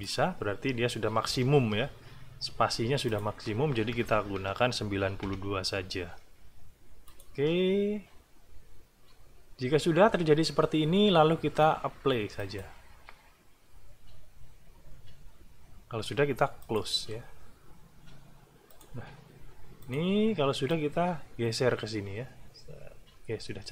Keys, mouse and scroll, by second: 1.6 alt+`, 3.0 click, 3.9 BackSpace, 5.2 KP_2, 7.1 click, 12.4 click, 16.6 click, 18.7 click, 19.8 click, 20.7-23.7 drag.